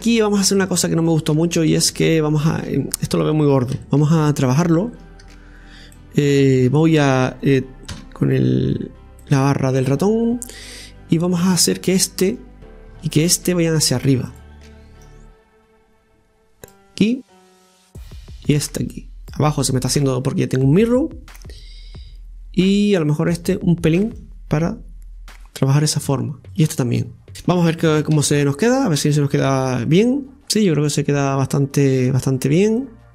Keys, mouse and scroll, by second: 0.1-0.7 scroll up 2, 0.7-1.3 shift+middle drag, 1.3 scroll down 2, 1.5-3.8 middle drag, 3.8 Tab, 4.6 Tab, 4.9 right click, 5.2 Tab, 5.9-7.9 middle drag, 7.9 KP_Divide, 8.8-9.2 scroll up 1, 9.2 middle click, 10.1-10.7 scroll up 2, 10.7-12.3 middle drag, 12.3-14.3 right drag, 14.3 click, 15.0-17.2 drag, 17.2 right click, 17.9-20.0 drag, 20.0 scroll down 1, 20.6 scroll down 1, 20.6-23.3 middle drag, 26.5 right click, 27.3 middle click, 28.2 Tab, 29.4 KP_Divide, 30.3 scroll down 1, 30.6-32.2 middle drag, 32.2-32.7 scroll up 3, 32.8 middle click.